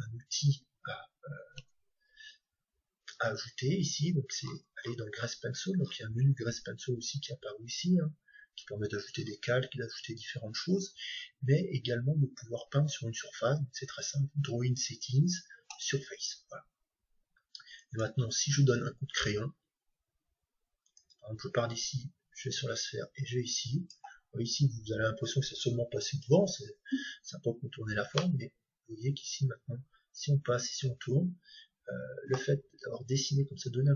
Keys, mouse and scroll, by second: 4.4-8.2 middle drag, 15.7-17.6 drag, 17.8-19.7 drag, 18.7-20.7 middle drag, 28.1-30.0 middle drag.